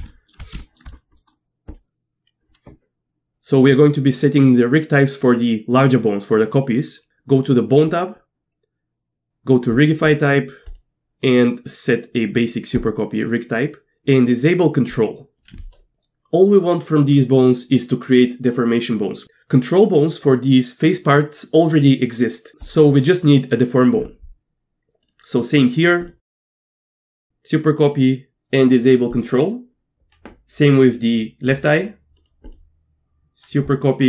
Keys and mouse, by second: 0.1 shift+click, 0.3 shift+middle click, 0.6 shift+middle click, 1.2 middle click, 1.7-12.8 drag, 14.9 click, 26.0 click, 29.1 click, 31.5 click, 32.2 click, 32.5-34.0 drag.